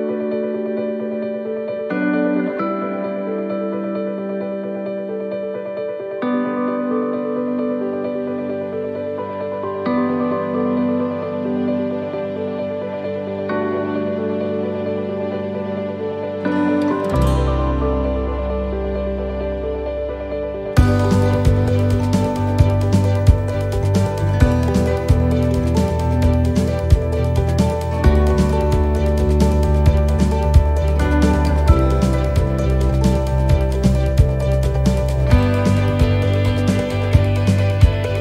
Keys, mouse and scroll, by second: 3.5 middle click, 4.1-4.7 scroll up 3, 4.6 middle click, 6.1-6.5 scroll down 3, 6.7 middle click, 8.7 x, 10.4 c, 16.8 middle click, 17.4 middle click, 18.1 right click, 18.8 middle click, 19.2 scroll up 3, 19.6 middle click, 21.3 right click, 22.1 x, 23.4 right click, 24.4 shift+right click, 24.9 middle click, 25.6-26.0 scroll down 3, 26.2 middle click, 26.6 x, 28.0 middle click, 30.8-31.3 scroll up 3, 31.5 middle click, 32.1 middle click, 32.4 scroll down 1, 32.9 scroll down 1, 32.9 x, 34.3 c.